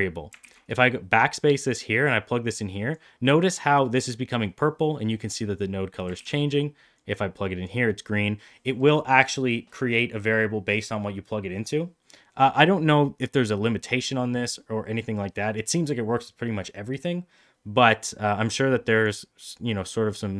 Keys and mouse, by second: 0.3 ctrl+z, 1.7-2.8 drag, 6.0 ctrl+z, 7.0-7.5 drag, 18.8 click.